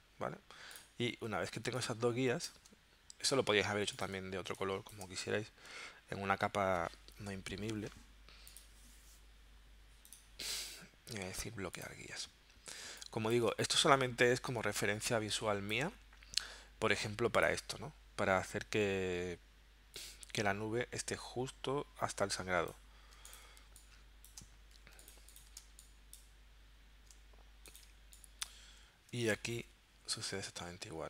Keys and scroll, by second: 1.6 space, 3.7 z, 4.3 space, 5.3 v, 12.9 space, 15.1 space, 23.6 space, 24.8 z, 25.6 space, 27.9 space, 29.1 v, 30.4 super+Tab.